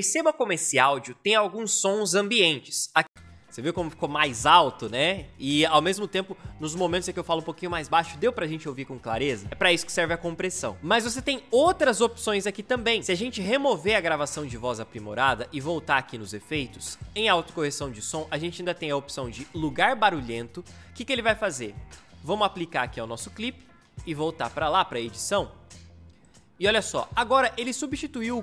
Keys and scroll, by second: 2.9 space.